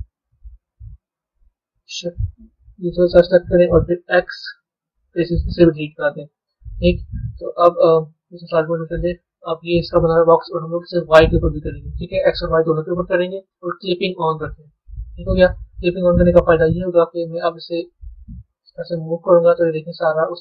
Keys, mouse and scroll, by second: 0.2-2.2 middle drag, 2.2 shift+click, 2.8-3.8 middle drag, 5.4-7.4 middle drag, 7.4 Tab, 8.0 z, 8.5 click, 9.0-11.0 middle drag, 11.0 click, 13.9 click, 15.5 b.